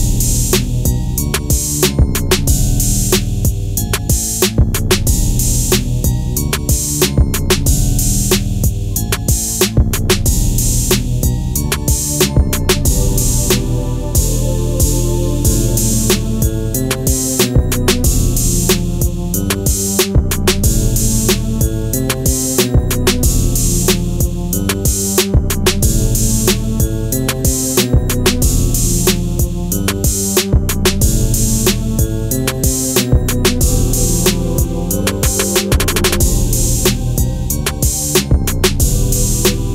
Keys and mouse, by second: 1.8 Return, 4.9 click, 6.5 middle click, 7.3 Tab, 7.9-8.3 middle drag, 9.5-10.4 right drag, 10.4 KP_3, 11.7 shift+d, 12.5 click, 13.1 s, 13.7 z, 15.2-15.8 middle drag, 16.1 s, 16.3 x, 17.2 click, 17.5-18.8 middle drag, 19.1 s, 19.9 click, 20.6-24.6 typing, 22.1 click, 22.9 click, 23.6 click, 25.0 click, 26.5 drag, 28.5 shift+d, 29.6 s, 29.9 x, 31.3 y, 32.2 click, 32.6 r, 33.2 click, 33.4 g, 34.0 click, 34.3 r, 34.6 click, 35.0-35.9 middle drag, 38.0 click, 39.0-39.5 middle drag.